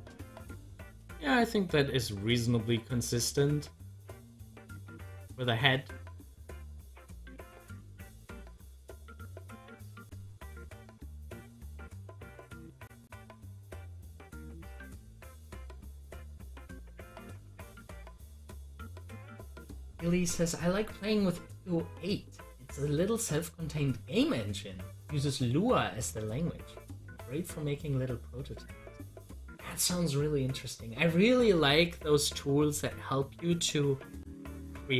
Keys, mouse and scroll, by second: 11.5 click, 11.7 double click, 17.0 click, 17.0 click, 33.7 scroll down 1, 34.5-34.9 middle drag.